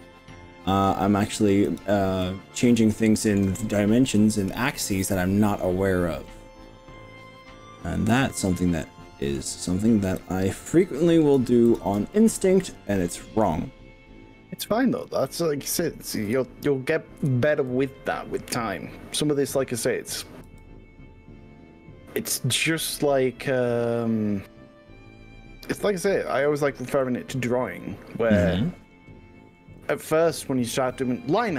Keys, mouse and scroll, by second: 1.7 click, 2.2 middle click, 6.3 middle click, 8.1 click, 8.5 middle click, 10.2 click, 10.8 middle click, 11.7 shift+click, 12.1-13.4 middle drag, 16.2 KP_3, 17.2 KP_1, 17.3 middle click, 17.7 s, 20.6 g, 22.8 click, 23.2-24.9 middle drag, 25.2-26.5 middle drag, 27.0 click, 27.7 middle click, 28.0 click.